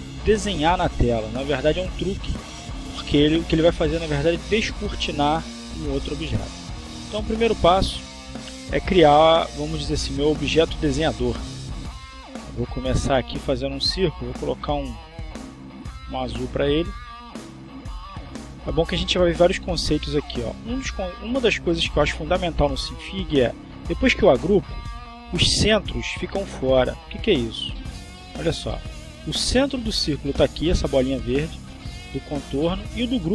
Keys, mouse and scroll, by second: 8.0 click, 12.0 click, 13.1-13.8 drag, 14.3 click, 15.0 click, 15.9 click, 16.5 click, 17.7 click, 24.4 click, 25.4 click, 27.6 click, 29.0 click, 32.4 ctrl+click.